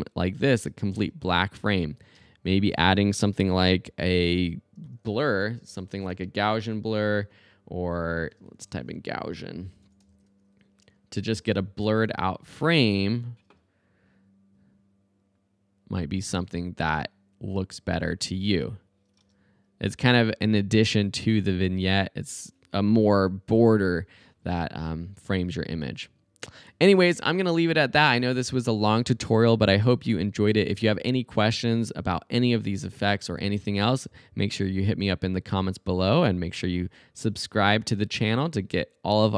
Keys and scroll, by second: 0.7 space, 2.2 space, 3.0 super+a, 5.1-6.6 typing, 8.7 super+g, 8.9-10.7 typing, 19.2 space.